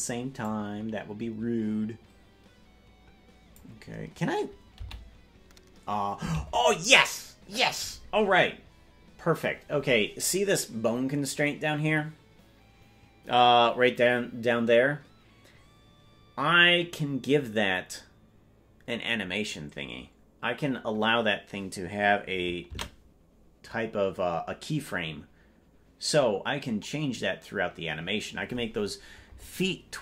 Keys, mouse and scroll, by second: 0.4-3.6 drag, 5.3 i.